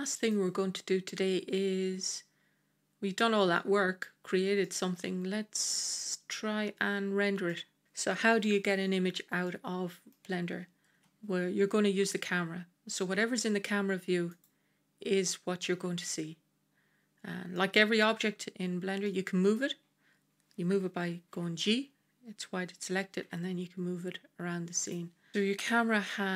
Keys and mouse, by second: 3.4-4.0 middle drag, 4.5-5.9 middle drag, 7.4-7.8 middle drag, 9.3-10.0 middle drag, 10.8 KP_0, 14.2 click, 17.4-17.9 middle drag, 18.9-19.5 middle drag, 21.2 g, 25.3 ctrl+z.